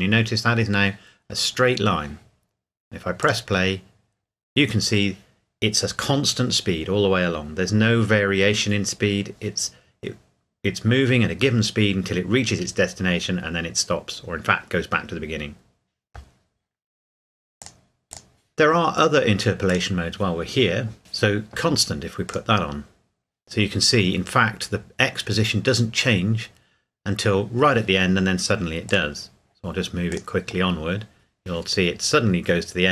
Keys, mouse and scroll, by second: 3.2 click, 17.6 click, 22.3 click, 28.9 click.